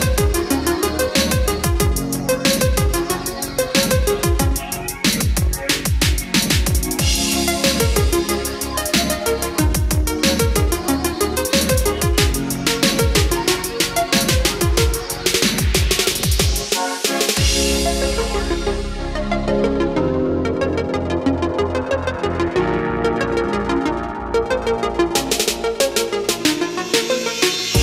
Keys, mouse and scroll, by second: 1.5-1.9 scroll up 1, 1.9 click, 2.4 scroll up 1, 4.1 ctrl+click, 4.6 middle click, 5.5-6.3 scroll down 1, 6.5-9.7 drag, 9.7-10.1 scroll down 1, 10.1-14.4 middle drag, 15.3 click, 16.6 scroll up 1, 19.3 scroll down 1, 20.4 click, 21.4-22.2 scroll down 1, 22.2 click, 22.5-22.8 scroll down 1, 23.0-23.5 scroll up 1, 23.5 middle click, 23.8 scroll up 1, 25.8 click, 27.6-27.8 scroll down 1.